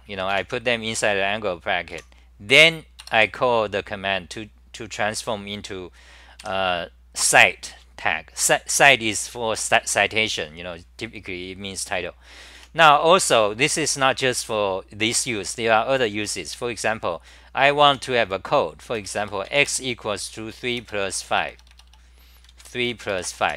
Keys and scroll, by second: 1.9 Home, 6.4 2, 12.6 e, 17.9 u, 21.2 BackSpace, 21.5 BackSpace, 21.7 BackSpace, 23.4 Home.